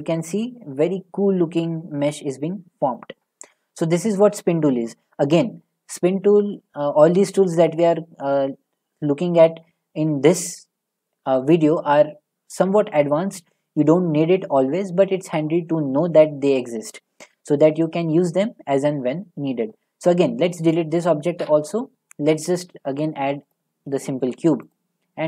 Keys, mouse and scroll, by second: 3.0 middle click, 3.1 Tab, 4.3 middle click, 5.6 middle click, 20.0 Tab, 20.7 click, 21.4 Delete, 22.2 a, 23.5 click, 24.7 click.